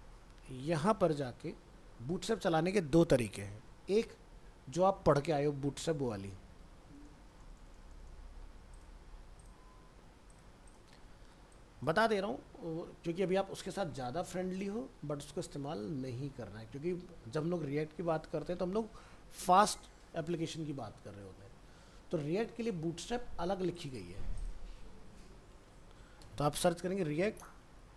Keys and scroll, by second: 0.5 alt+Tab.